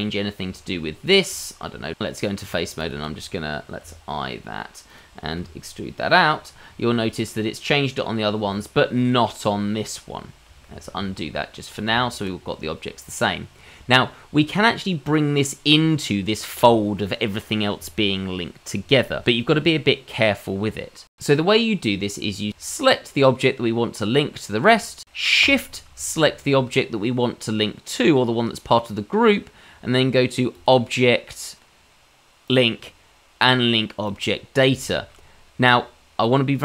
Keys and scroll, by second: 1.7 Tab, 3.8 i, 5.4 e, 10.7 ctrl+z, 10.9 ctrl+z, 11.9 Tab.